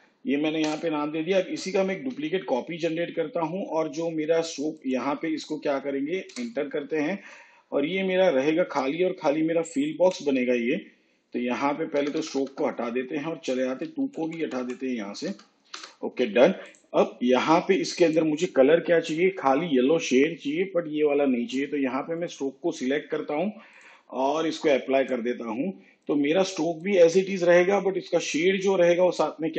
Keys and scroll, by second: 0.6 Return, 1.9 ctrl+d, 6.2 Return, 10.8 BackSpace, 13.0 Right, 15.2 BackSpace.